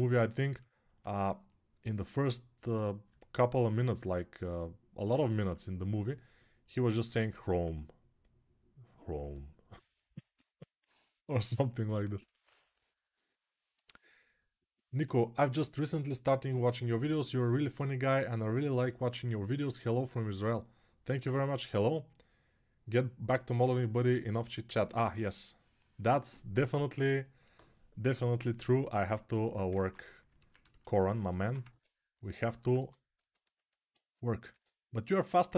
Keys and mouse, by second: 29.5 ctrl+Tab, 31.5 ctrl+Tab, 32.5 Tab, 33.0-35.5 ctrl+alt+middle drag, 34.2 shift+d.